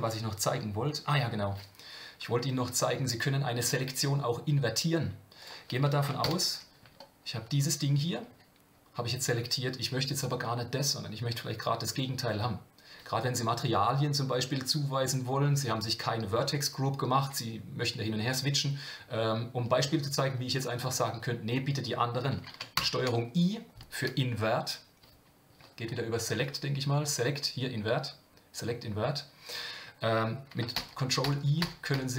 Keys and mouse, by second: 6.2 ctrl+l, 22.8 ctrl+i, 26.4-29.6 drag, 30.8-32.1 ctrl+i.